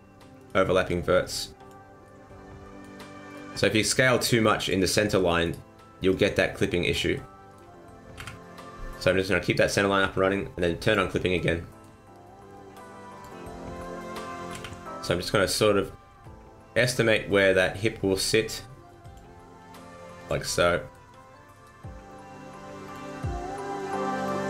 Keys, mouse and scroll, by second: 0.3 right click, 0.8 click, 2.0 middle click, 3.2 right click, 3.9 click, 5.4 right click, 6.0 click, 7.1 middle click, 8.1 KP_1, 10.8 click, 11.3 middle click, 13.1 click, 13.7 right click, 14.4 KP_1, 16.1 r, 20.1 click, 20.5 middle click, 21.4 right click, 22.8 click, 23.7 right click, 24.1 right click.